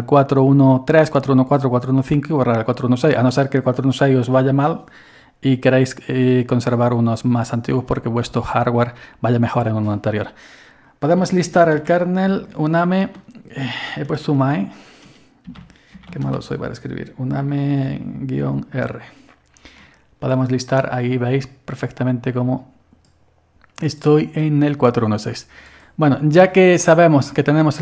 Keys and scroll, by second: 10.9-12.3 typing, 14.3-16.6 typing, 17.9-18.8 typing, 19.8 typing.